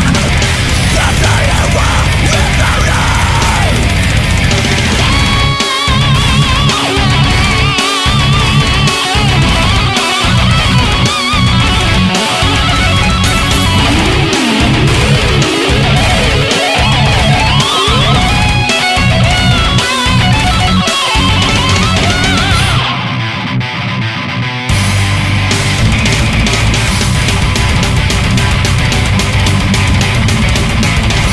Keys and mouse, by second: 0.3 right click, 4.3 ctrl+z, 10.9 ctrl+z, 13.1 ctrl+z, 13.9 right click, 15.5 ctrl+z, 16.5 right click, 18.1 ctrl+z, 23.4 right click, 24.9 right click, 25.3 ctrl+z, 25.4 ctrl+z, 25.8 ctrl+z, 26.2 ctrl+z, 26.4 ctrl+z, 28.1 ctrl+z, 28.3 ctrl+z, 29.4 ctrl+z, 30.2 ctrl+z.